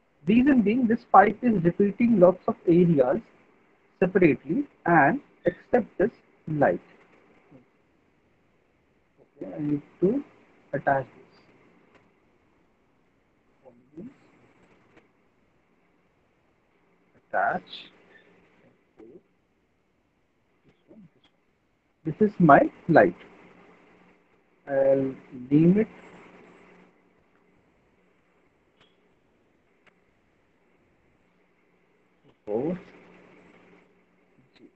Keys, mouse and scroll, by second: 5.1 middle click, 5.6 middle click, 5.8 alt+middle click, 6.7 ctrl+click, 7.5 click, 11.6 right click, 13.7 click, 17.1 click, 18.6 F4, 19.2 middle click, 19.4 middle click, 19.6 middle click, 20.5 click, 24.0 click, 26.1 click, 27.3 ctrl+a, 28.4-30.0 typing, 31.8-33.1 typing, 34.4-34.7 typing.